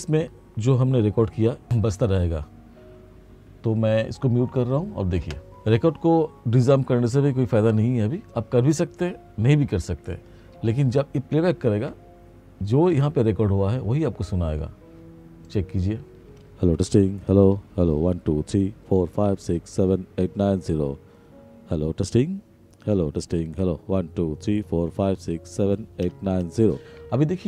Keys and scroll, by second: 16.1 space, 27.1 space.